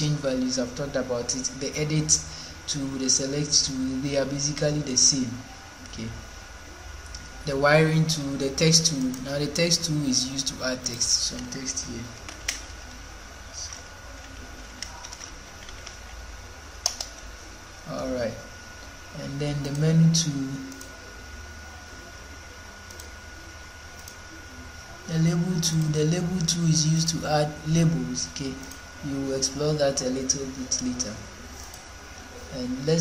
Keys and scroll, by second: 11.4-16.3 typing, 16.8 Return.